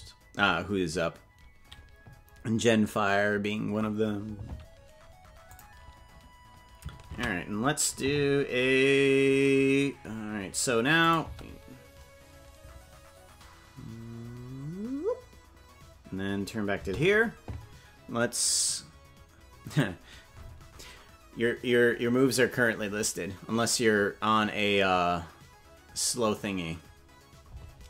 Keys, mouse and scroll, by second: 5.5 click, 11.0 click, 11.2 space, 16.7 space.